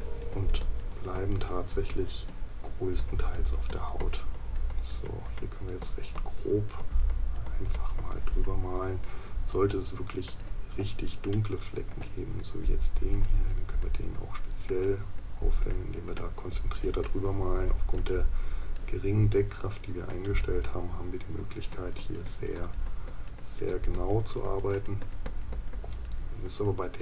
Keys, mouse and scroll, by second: 11.1 right click.